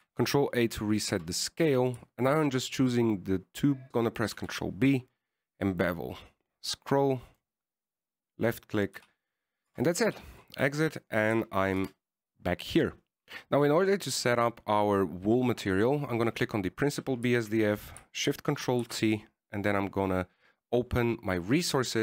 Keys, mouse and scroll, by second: 1.2 ctrl+a, 2.1 middle click, 2.4 Tab, 3.0 right click, 3.7 shift+right click, 5.6 ctrl+b, 9.3 scroll up 1, 9.3 middle click, 10.2 w, 11.0 Tab, 11.3 w, 12.6 KP_1, 13.1 KP_0, 13.2 click, 13.7 click, 14.2 click, 20.2 ctrl+shift+t.